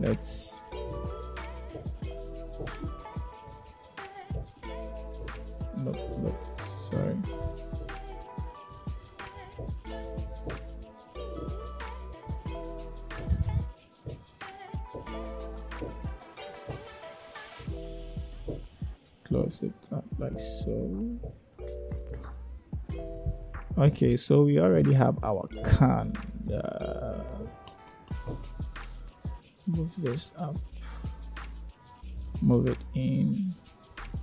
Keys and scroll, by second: 23.0 Tab, 28.4 Tab.